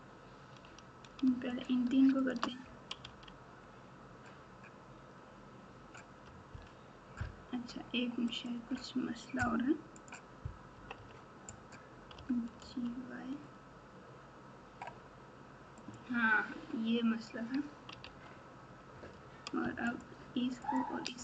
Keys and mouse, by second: 1.5 shift+click, 2.2 shift+click, 3.0 f, 8.2 click, 10.0 click, 10.7 KP_4, 10.9 KP_4, 12.1 g, 18.0 alt+z, 19.9 shift+click, 20.6 shift+click.